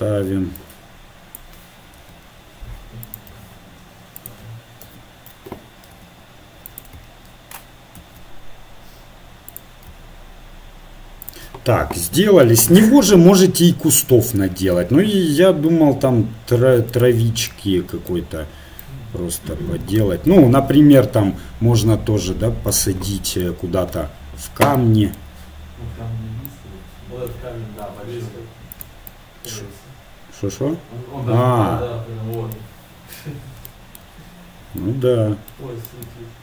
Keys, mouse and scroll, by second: 0.6-1.9 drag, 2.0 r, 3.3 s, 4.9 KP_7, 5.9 r, 8.0 shift+d, 9.9 s, 12.9 shift+d, 14.8 s, 17.5-19.7 middle drag, 21.3 g, 25.1 middle click, 25.7-27.1 middle drag, 27.9 g, 29.4-31.0 middle drag, 36.1-36.4 right drag.